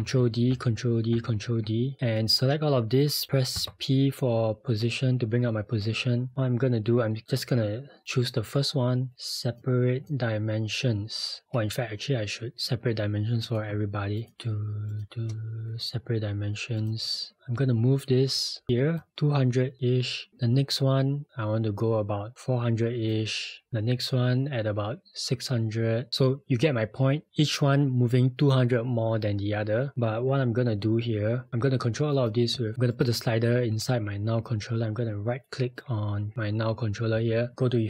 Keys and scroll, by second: 0.0 ctrl+d, 0.5 ctrl+d, 3.6 p.